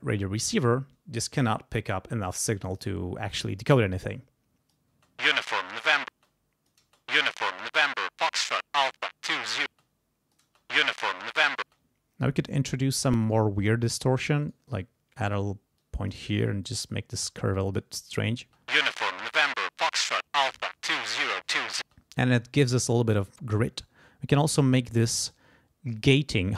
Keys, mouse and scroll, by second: 4.1 click, 5.0 space, 6.1 space, 6.2 click, 6.8 space, 9.7 space, 9.8 click, 10.4 space, 11.6 space, 13.2 right click, 13.6 click, 14.4-15.4 right drag, 14.7 click, 15.8 click, 16.6 click, 17.5 click, 18.4 space, 21.8 space, 23.6-25.5 drag, 26.0-26.5 drag.